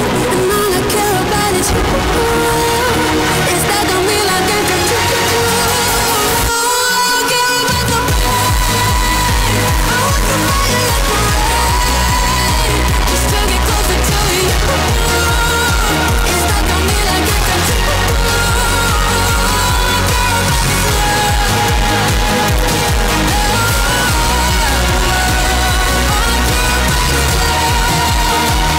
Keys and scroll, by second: 19.1 Page_Down.